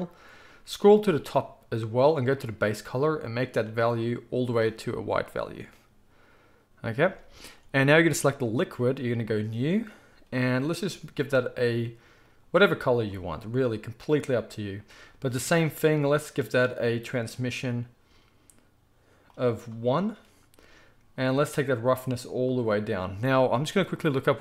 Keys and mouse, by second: 2.5-8.1 middle drag, 7.0 z, 8.1 click, 8.2 middle click, 9.2-11.6 drag, 11.6-19.3 middle drag, 19.3-24.4 drag.